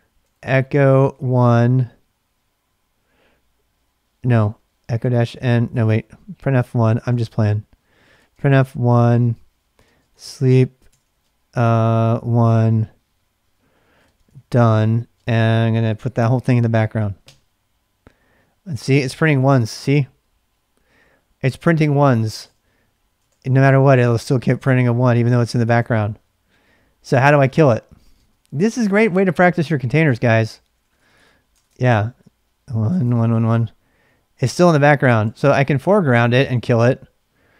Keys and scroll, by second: 0.0-1.6 typing, 4.1-8.3 typing, 9.5-12.2 typing, 13.7-17.7 typing, 22.5 Return, 23.2 Return, 23.5 Return, 24.5 Return, 25.6 Return, 25.7 Return, 27.7-37.5 typing, 31.5 Return, 31.7 Return, 33.2 Return, 34.5 Return.